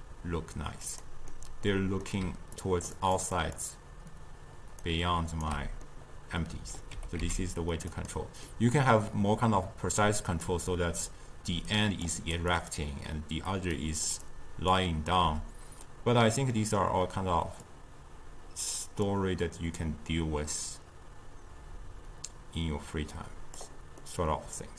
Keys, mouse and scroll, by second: 1.4-2.3 middle drag, 2.3-5.5 typing, 2.6 drag, 3.0 click, 3.4 click, 4.9 right click, 5.9-7.0 middle drag, 7.0 g, 8.5-11.5 middle drag, 11.5-15.3 typing, 11.8 click, 12.2 click, 12.6 click, 13.8 click, 14.3 click, 16.6-17.7 middle drag, 17.7-23.8 drag, 24.1-24.7 middle drag.